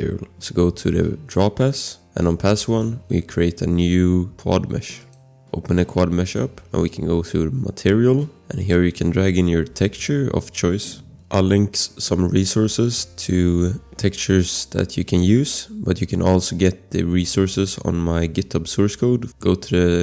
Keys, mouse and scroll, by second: 1.7 click, 2.7 click, 5.2 click, 6.7 scroll.